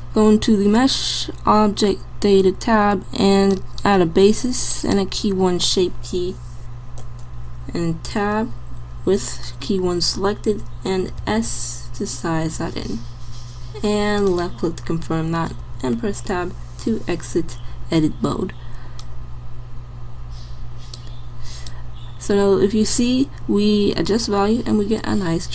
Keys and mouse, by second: 8.2 Tab, 11.2 s, 15.7 Tab.